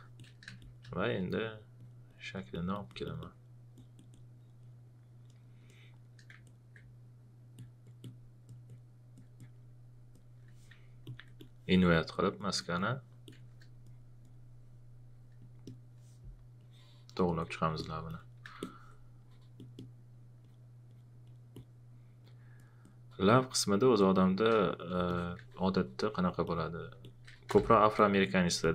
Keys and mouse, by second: 0.5 space, 6.4 alt+click, 11.0 ctrl+click, 13.8 click, 18.6 alt+click, 26.0 alt+click, 27.1-28.1 typing, 27.9 click.